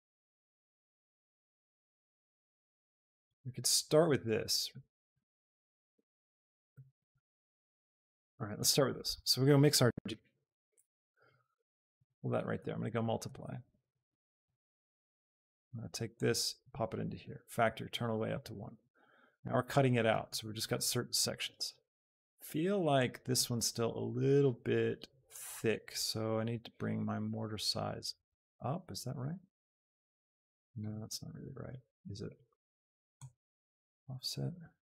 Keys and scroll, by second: 9.2 shift+a, 10.0 i, 10.7 Return.